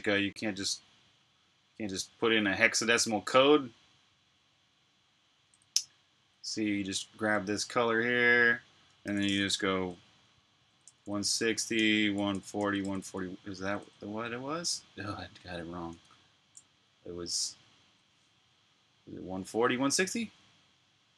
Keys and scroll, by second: 10.8-14.4 typing, 13.8 Return, 15.9 super+Tab.